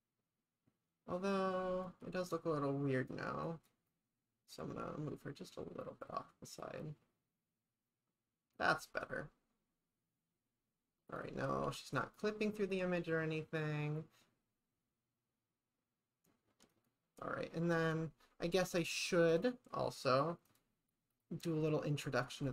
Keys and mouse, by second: 3.1 click, 3.9-8.6 drag, 11.7 ctrl+s, 16.8 click, 19.3 click, 20.5 click, 21.1 click.